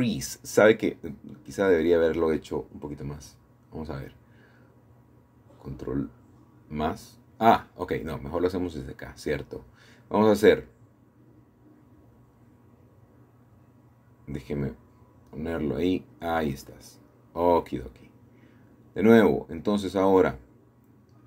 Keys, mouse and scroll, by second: 0.0 Escape, 0.2 Escape, 0.3 Escape, 1.1 ctrl+z, 1.9-3.5 shift+middle drag, 2.9-3.5 scroll up 1, 4.0 shift+middle click, 4.6 click, 12.1 shift+middle click, 19.4 shift+click, 20.6 ctrl+KP_Add.